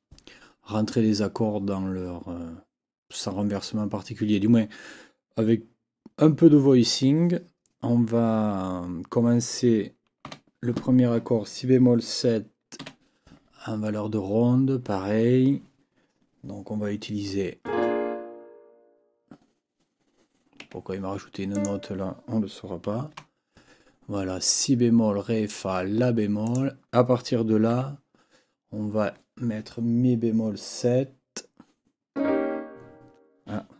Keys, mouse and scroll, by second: 10.2 n, 12.8 KP_7, 20.6 Escape, 21.5 click, 23.1 Delete, 26.4 click, 27.7 n.